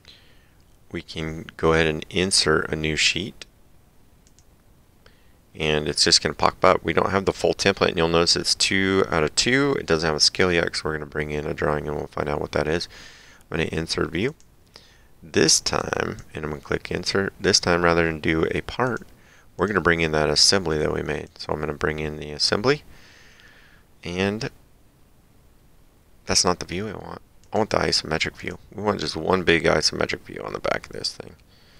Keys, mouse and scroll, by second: 4.3 click, 14.3 click, 15.8 click, 18.9 click, 21.3 click, 27.4 click.